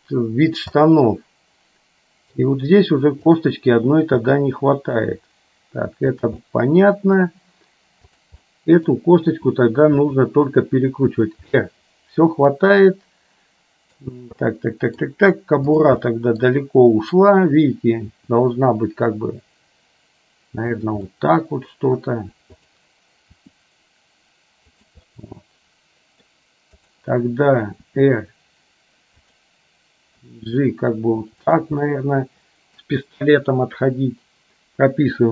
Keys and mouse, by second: 0.9-2.4 middle drag, 3.4 click, 4.3 g, 6.5 middle click, 8.1 click, 8.6 middle click, 10.3 r, 11.5-14.0 middle drag, 14.6 middle click, 16.3 middle click, 18.3 r, 21.1 middle click, 23.5 r, 25.3-26.4 middle drag, 26.9 click, 28.0 r, 30.4 g, 32.0 middle click.